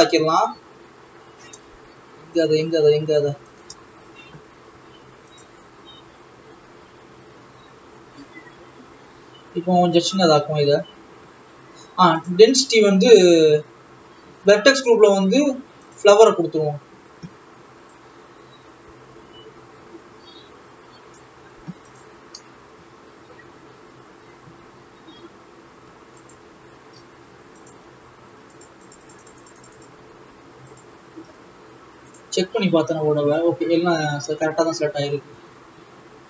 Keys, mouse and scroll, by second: 5.9 click, 6.7 scroll up 5, 7.2 scroll up 7, 7.7-9.1 scroll up 23, 9.4-9.8 scroll down 5, 16.5 click, 19.0-22.6 drag, 23.3 click, 24.0 Tab, 28.1 shift+click, 29.4-31.9 drag, 31.9 alt+a, 32.6-34.9 drag, 34.9 Tab.